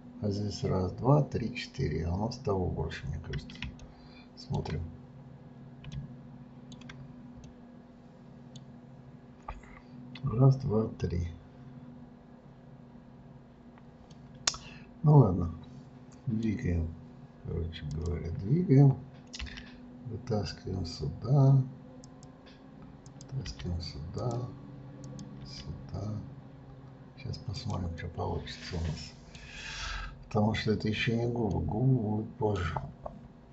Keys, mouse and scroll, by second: 2.6-3.7 scroll down 3, 3.7-5.3 shift+middle drag, 5.3-5.9 scroll up 1, 5.9-10.4 middle drag, 14.1-17.1 middle drag, 17.9 click, 19.4 g, 23.0 click, 23.4 g, 25.0 click, 25.4 g, 27.9-29.9 middle drag, 29.9-31.5 scroll up 2, 31.5-33.5 middle drag.